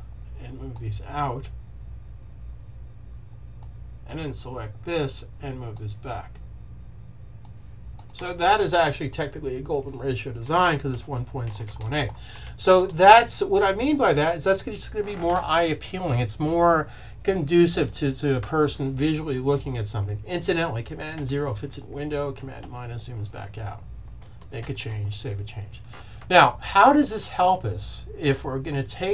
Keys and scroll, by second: 10.8 super+-, 12.6 super+s, 21.1 super+0, 22.4 super+-, 24.6 super+s.